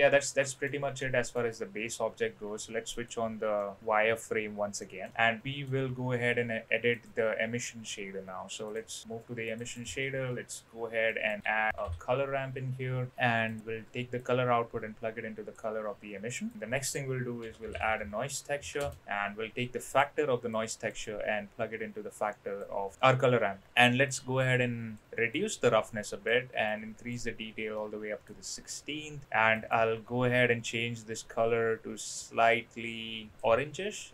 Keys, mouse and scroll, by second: 0.9-1.3 middle drag, 2.9 click, 3.6 middle drag, 4.8 middle click, 5.1 middle click, 7.0 click, 8.7 click, 9.5 drag, 9.7 shift+click, 9.9 shift+a, 14.2-15.6 drag, 16.3 click, 16.5 shift+a, 20.5 click, 21.1-22.6 drag, 24.1 click, 25.3-26.3 drag, 26.7 click, 27.8-28.2 middle drag, 29.6-30.1 drag.